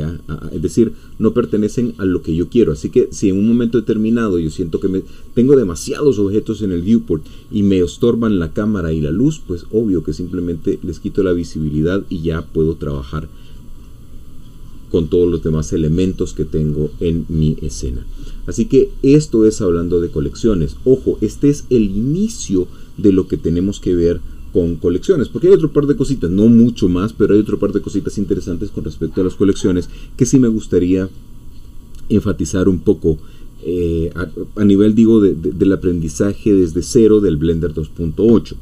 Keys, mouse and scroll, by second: 2.8-4.8 scroll down 2, 10.6 click, 11.3 scroll down 2, 11.6-13.8 middle drag, 13.8 scroll up 2, 14.6-15.3 scroll up 2.